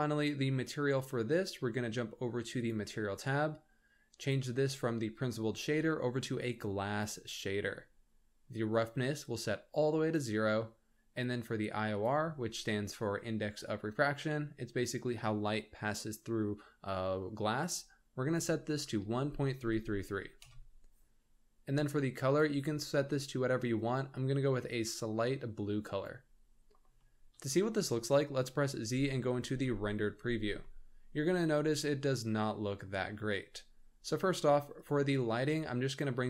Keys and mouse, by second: 4.1-7.1 drag, 9.2 click, 11.9-20.4 drag, 19.3 KP_3, 22.2 click, 27.1 middle click, 27.3 click, 27.9 z, 29.4 shift+click, 29.4 shift+middle drag, 30.0 z, 30.6-32.8 middle drag, 35.9 middle click.